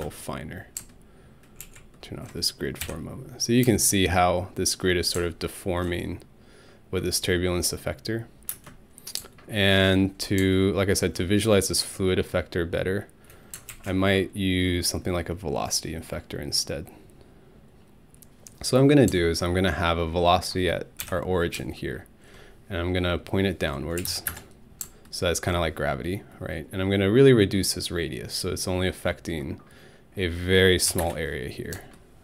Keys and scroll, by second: 2.8 alt+Home, 8.5 space, 21.0 alt+Home, 23.8-24.6 typing, 30.9 1, 31.0 Return.